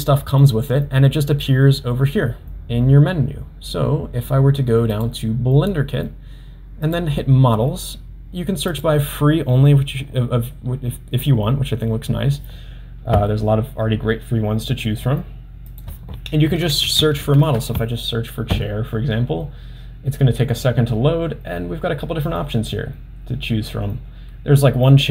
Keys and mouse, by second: 15.9-25.1 drag.